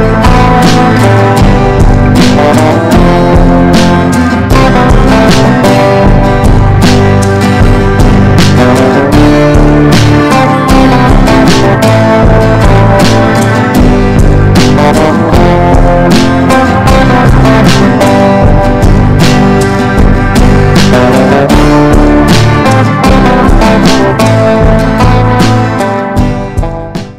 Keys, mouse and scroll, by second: 0.1 ctrl+g, 2.1 click, 4.4 Down, 4.9 Down, 5.1 Down, 6.8 click.